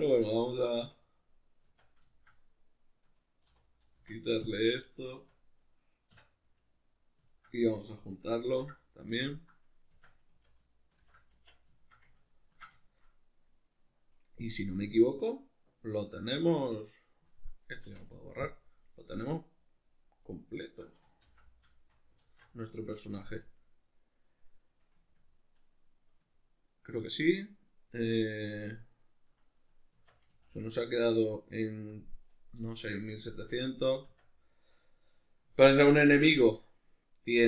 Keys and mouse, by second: 0.9 \, 1.7 Tab, 3.4 3, 3.6 right click, 4.0 x, 5.2 Tab, 6.1 \, 7.3 shift+right click, 8.4 ctrl+j, 9.2-17.7 ctrl+middle drag, 9.9 Tab, 10.2 a, 11.0 shift+n, 11.3 Tab, 17.7 right click, 17.9 x, 18.8 right click, 19.1-29.1 middle drag, 21.3 shift+c, 22.3 alt+q, 23.2 a, 29.9 Tab, 30.3 a, 30.8-33.3 ctrl+middle drag, 33.3 Tab, 34.5-37.4 middle drag.